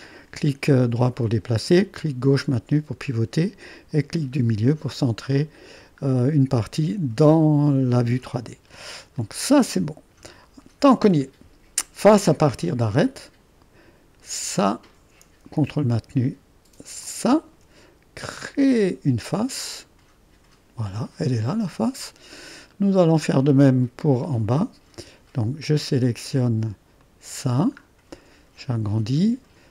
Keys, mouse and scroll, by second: 3.2-4.8 drag, 9.2-11.2 drag, 13.0-15.7 drag, 17.1 ctrl+click, 18.4-22.8 drag, 22.8-26.4 middle drag, 27.0 click, 27.9 click.